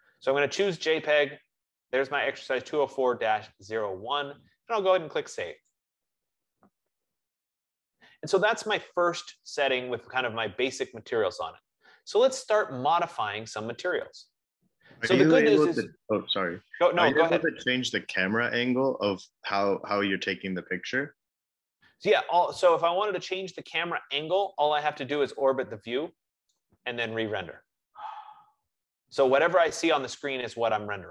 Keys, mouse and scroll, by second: 6.0-11.1 drag, 13.6-18.4 drag, 20.4 F15, 25.0 click, 26.0 click, 26.7-31.1 right drag.